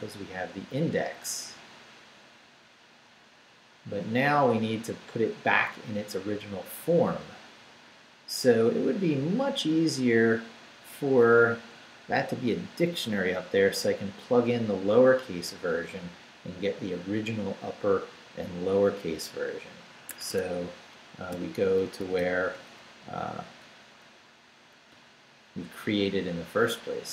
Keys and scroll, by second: 20.1 Escape, 21.0 shift+Escape, 21.3 shift+g, 22.2 g, 23.0 Down, 24.5 Down.